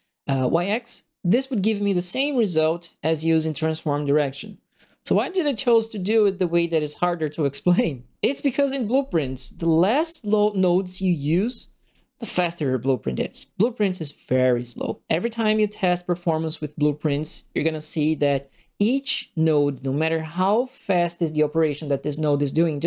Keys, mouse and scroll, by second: 3.2 click, 4.6 click, 10.7 click, 11.8 click, 18.8 click, 19.7 click.